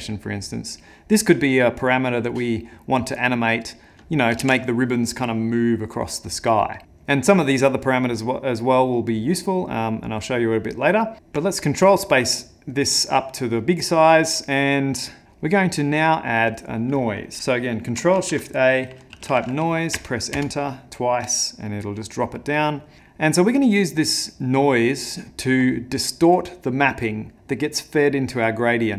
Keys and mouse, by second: 4.5 ctrl+z, 9.2 middle click, 10.7 middle click, 11.1 ctrl+space, 11.1 click, 11.6 middle click, 12.8 click, 14.1 click, 15.9 middle click, 16.4 click, 17.4 ctrl+shift+a, 18.2 ctrl+shift+a, 22.1 click.